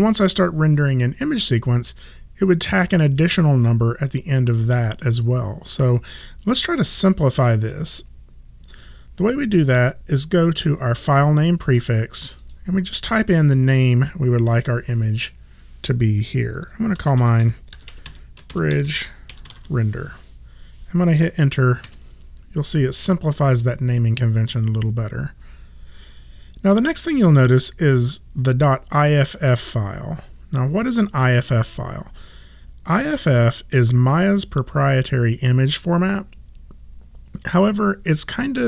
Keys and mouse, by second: 12.4 click, 16.7-20.0 typing, 21.8 Return.